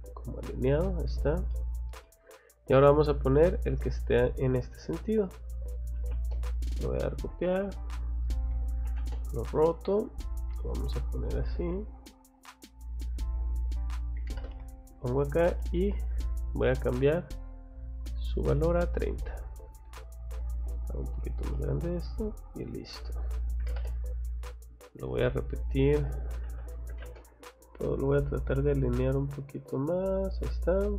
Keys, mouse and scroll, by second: 0.2 click, 1.0 scroll down 1, 1.1 2, 1.5 middle click, 2.0 middle click, 4.0 click, 5.5 c, 5.9 o, 6.1 space, 6.4 click, 7.2 click, 7.6 click, 7.8 click, 8.5 r, 8.9 o, 9.0 space, 9.1 middle click, 9.4 click, 12.6 click, 13.1 click, 13.3 click, 14.2 m, 14.3 space, 14.5 click, 15.1 click, 15.9 click, 16.9 click, 17.3 click, 17.8 click, 18.7 click, 20.2 click, 20.8 click, 21.2 Escape, 21.5 middle click, 21.9-22.2 scroll up 1, 22.2 click, 22.4 click, 23.6 m, 23.7 space, 23.9 click, 24.4 click, 24.8 click, 25.0 click, 26.4 r, 26.9 o, 27.0 space, 27.4 click, 30.2 click, 30.8 click.